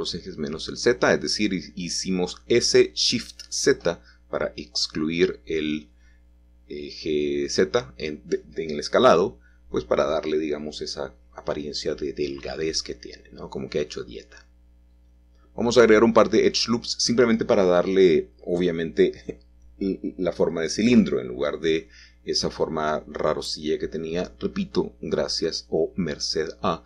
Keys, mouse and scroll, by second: 0.1 click, 3.7 1, 6.0 g, 8.0 x, 12.1-13.2 shift+drag, 14.5-15.6 drag, 17.6 click, 19.1 ctrl+r, 19.5-20.6 drag, 22.3 click, 23.5 middle click, 25.0 scroll down 2, 25.6-26.0 scroll up 3, 25.8 middle click.